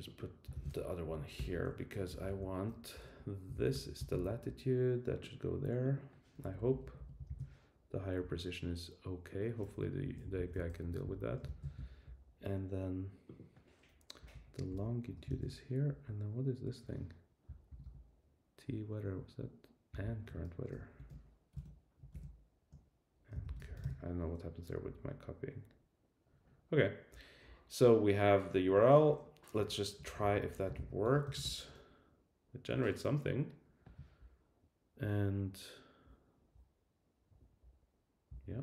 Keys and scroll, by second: 1.0 Down, 1.3 Return, 2.1 alt+Left, 2.9 alt+Right, 3.5 shift+super+Left, 4.0 super+c, 7.3 super+v, 10.0 Right, 10.2 Left, 10.7 Left, 11.5 super+c, 14.2 Left, 14.7 alt+shift+Left, 15.3 super+v, 15.9 Right, 17.7 shift+super+], 19.9 shift+super+[, 24.9 Right, 29.6 Right, 30.0 shift+Down, 30.7 super+c, 31.0 super+t, 31.2 super+v, 31.4 Return.